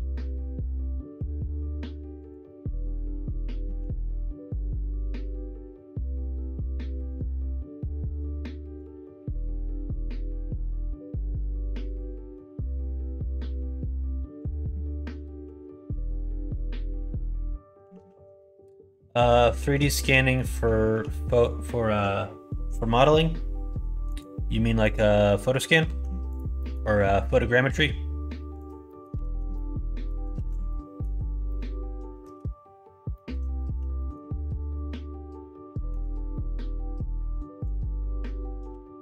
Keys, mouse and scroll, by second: 0.2 middle click, 0.7 s, 2.4-3.5 middle drag, 2.4 scroll up 1, 3.6 ctrl+z, 4.6 click, 6.3 s, 7.2 g, 8.2 middle click, 9.3 click, 9.9 click, 10.2 g, 12.1 middle click, 12.8 click, 13.1 g, 17.9 ctrl+z, 18.3 middle click, 18.8 middle click, 19.5 shift+middle click, 20.0 middle click, 20.9 1, 21.3 click, 24.0 click, 24.8 click, 25.8 alt+z, 26.2 click, 26.5 middle click, 27.6 g, 28.8 middle click, 29.2 alt+z, 29.5 middle click, 30.3 ctrl+z, 30.6 middle click, 31.4 middle click, 33.1 middle click, 33.5 shift+middle click, 33.9 middle click, 34.7-35.8 middle drag, 36.3 middle click, 37.6 click, 38.6 g.